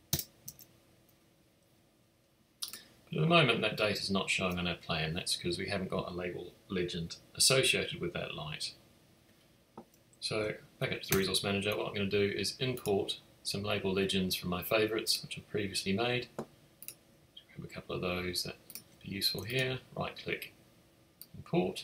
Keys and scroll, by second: 0.1 Tab, 11.1 super+r.